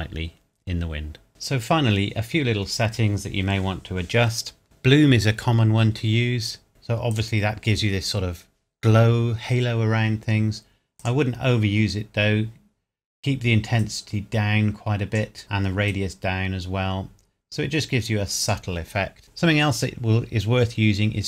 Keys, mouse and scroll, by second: 1.3 scroll down 1, 7.1 click, 11.0 click, 13.8 click.